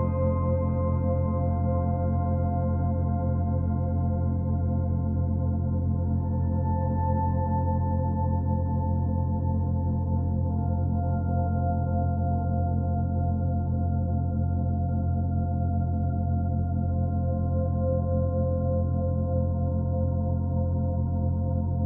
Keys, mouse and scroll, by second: 0.4-1.7 scroll up 12, 1.7 click, 2.0-4.5 middle drag, 4.5 Tab, 4.8-6.2 middle drag, 6.2 2, 6.5 click, 6.8 b, 7.2 3, 7.6 click, 8.4 b, 8.9 b, 10.2 g, 11.7 y, 12.2 s, 13.5 alt+middle click, 14.3 g, 19.9 2, 20.4 click, 20.6 g.